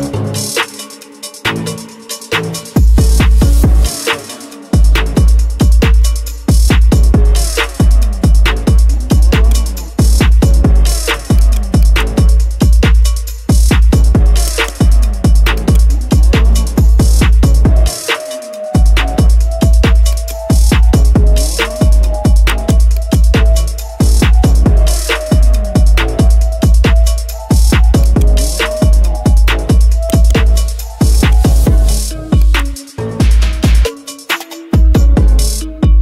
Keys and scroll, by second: 27.6 x, 31.8 x.